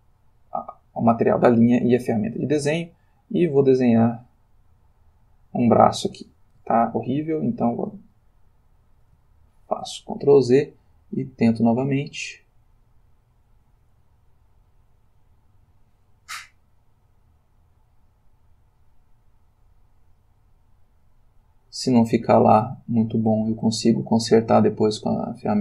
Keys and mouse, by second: 2.4-6.7 drag, 6.7 ctrl+z, 8.2-10.0 shift+middle drag, 11.2-25.6 drag.